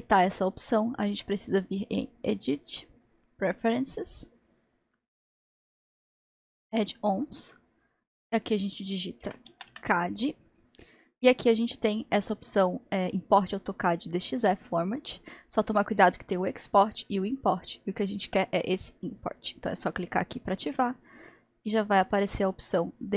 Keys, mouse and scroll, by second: 5.3-5.8 drag.